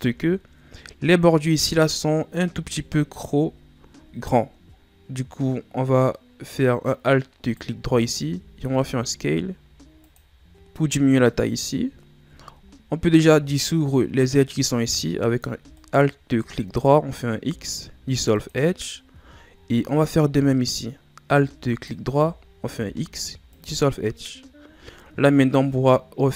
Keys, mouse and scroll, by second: 0.0 Tab, 2.9 alt+right click, 3.7-4.1 scroll down 1, 4.1-5.3 ctrl+scroll up 2, 7.4 right click, 8.0 alt+right click, 8.7 s, 10.5 a, 10.6-12.0 scroll up 1, 12.0-12.7 ctrl+scroll up 1, 12.7-15.1 shift+scroll up 1, 15.7 alt+right click, 17.4 x, 19.3-21.3 shift+scroll up 5, 21.6 alt+right click, 22.7 x, 24.8 shift+scroll up 1, 24.9-25.2 shift+scroll down 3, 25.5 shift+scroll down 1.